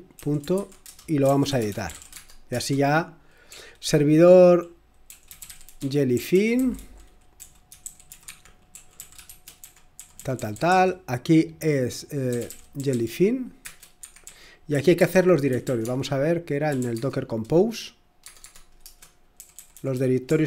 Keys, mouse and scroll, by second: 0.0-4.2 typing, 5.2-17.1 typing, 19.3-20.4 typing.